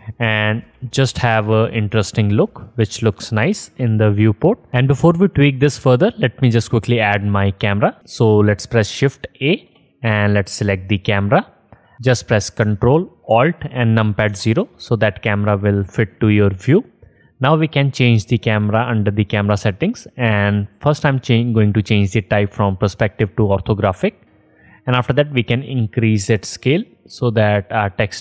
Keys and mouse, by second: 0.8 g, 2.8 middle click, 2.9-7.7 drag, 7.7 middle click, 7.9 click, 9.7 shift+a, 13.6 ctrl+alt+click, 14.5 ctrl+alt+KP_0, 22.5-26.2 middle drag, 26.3 middle click.